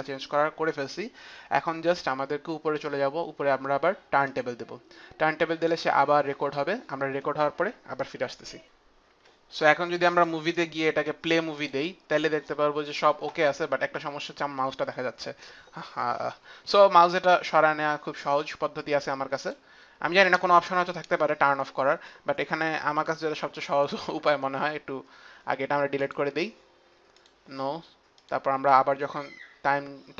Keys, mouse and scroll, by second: 4.2 click, 8.7 F9, 9.7 click, 11.2 click, 19.1 click, 23.1 click, 25.6 click, 26.8 click, 27.8 click, 29.9 click.